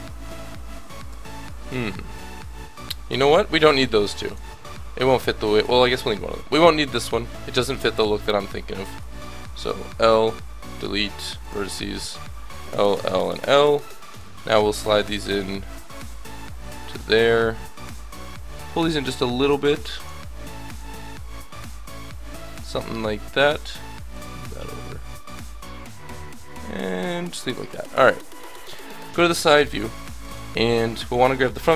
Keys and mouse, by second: 0.0 a, 0.5-2.3 drag, 1.1 l, 3.3 l, 3.9 Delete, 5.7 ctrl+z, 7.9 Delete, 8.9 ctrl+z, 10.1 l, 10.7 Delete, 12.5 l, 13.0 l, 13.6 l, 14.2-16.5 drag, 17.3 a, 17.7-19.1 drag, 18.3 l, 19.4-20.7 drag, 21.0 click, 21.0 l, 22.5-26.0 drag, 27.7-29.0 drag, 29.0 KP_3, 30.2 a, 30.3 b.